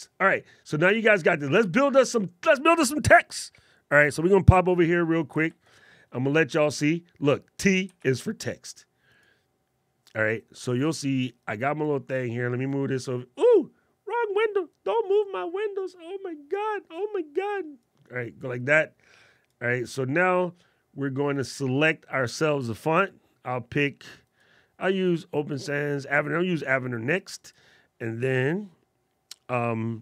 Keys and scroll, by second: 5.2 alt+super+8, 8.1 alt+super+8.